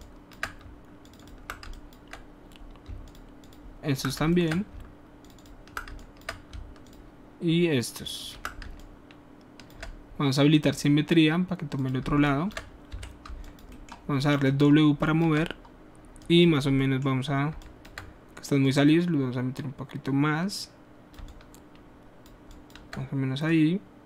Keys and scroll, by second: 8.6 typing, 12.9 alt+w.